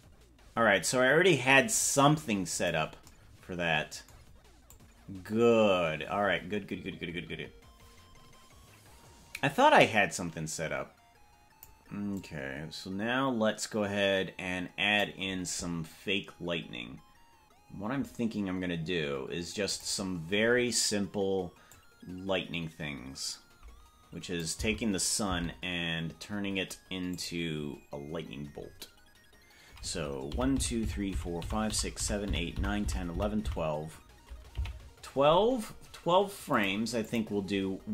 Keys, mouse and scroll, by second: 4.8-11.9 drag, 12.3-15.3 drag, 19.7 click, 21.8-24.9 drag, 24.9 Left, 25.6 Left, 27.1 click, 28.6-29.0 scroll up 6, 30.6 Right, 30.8 Right, 31.0 Right, 31.4 Right, 31.6 Right, 32.0 Right, 32.2 Right, 32.6 Right, 32.8 Right, 33.2 Right, 33.4 Right, 33.8 Right, 34.8 Left, 36.6 click, 37.1 click.